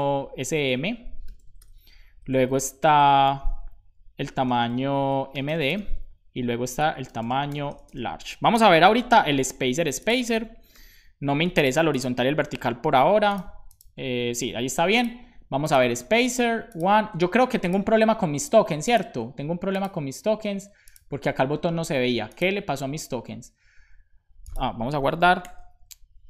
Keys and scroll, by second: 3.3 super+c, 3.5 Down, 4.6 super+v, 4.9 Left, 6.7 Left, 7.8 shift+space, 9.0 super+s, 12.4 super+Left, 25.3 super+s.